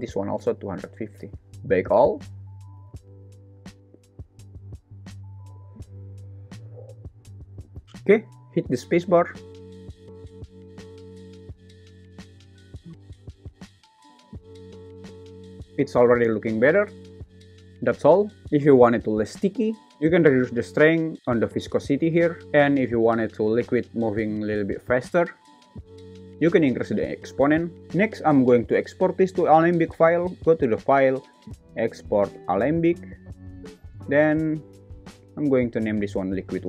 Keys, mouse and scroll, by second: 2.6 click, 7.8 shift+Left, 8.2 space, 17.7 super+s, 30.0-32.8 drag.